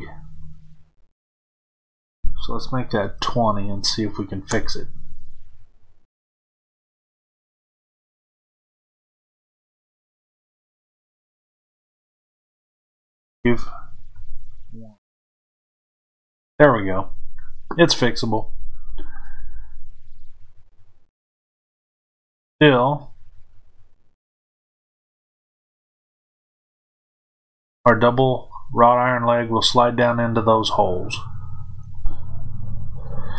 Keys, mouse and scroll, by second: 1.3-20.1 drag, 4.5 KP_Enter, 15.1 KP_Enter, 20.1-33.3 middle drag, 32.4 KP_1.